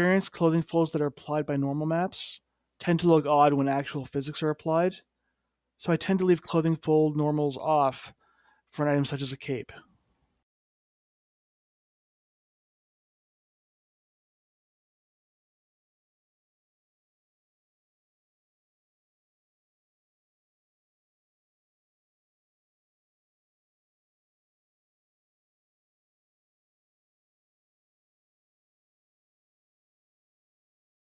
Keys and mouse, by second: 0.5-1.8 middle drag, 2.5-4.9 drag, 7.5 ], 9.1 middle click, 12.1 g, 18.1 click, 18.6 middle click, 19.8 F3, 21.5 click, 21.8 middle click, 22.6 middle click, 23.4 click, 24.0 middle click, 24.6 click, 25.7 click, 26.2 middle click, 26.5-27.5 middle drag, 28.0 middle click, 30.4-31.0 middle drag.